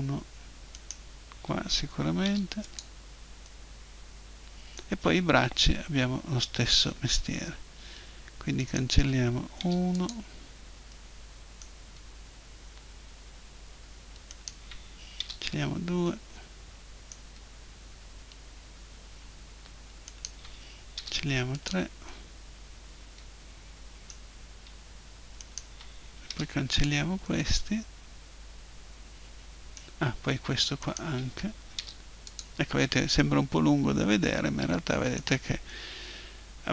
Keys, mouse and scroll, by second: 0.7-2.7 right drag, 2.3 Delete, 3.5-5.1 middle drag, 8.6-10.4 right drag, 9.6 Delete, 14.3-16.0 right drag, 15.2 Delete, 16.0-17.1 middle drag, 20.1-21.9 right drag, 20.9 Delete, 21.8-23.4 middle drag, 25.4 right click, 26.3 Delete, 26.3 click, 27.2-29.1 middle drag, 30.8-31.8 right drag, 31.8 Delete, 32.5 click, 33.1-35.0 middle drag, 35.7-36.7 middle drag.